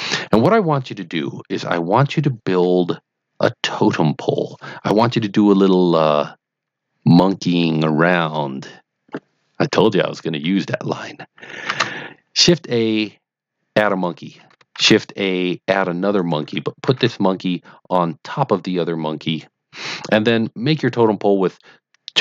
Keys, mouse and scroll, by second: 11.6 shift+a, 13.8 click, 14.7 shift+a, 16.1 click, 16.8 g, 16.9 z, 19.1 click, 20.4-21.0 middle drag.